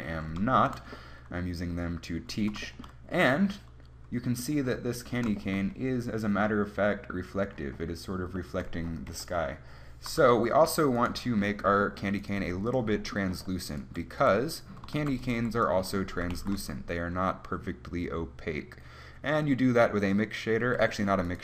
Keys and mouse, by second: 9.2 KP_1, 12.5 g, 14.3 g, 15.1 shift+d, 15.4 g, 15.7 click, 16.4 shift+a, 21.3 click.